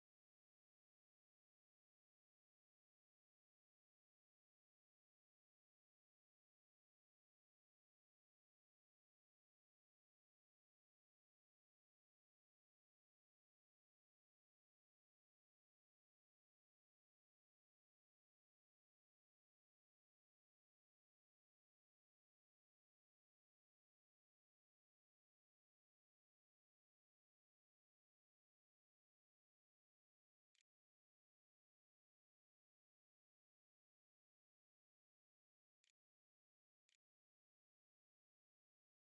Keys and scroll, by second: 29.3-31.7 typing, 34.9 Tab, 36.2 ctrl+a, 36.4 ctrl+s, 37.2 a.